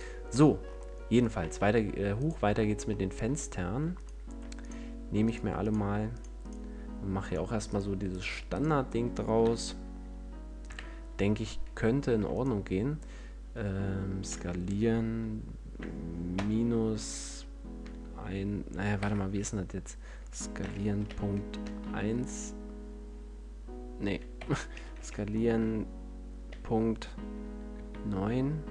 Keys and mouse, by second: 1.3 Tab, 1.9 Tab, 9.3 KP_1, 10.5 KP_5, 12.1 e, 12.3-14.1 drag, 14.1 s, 20.5 s.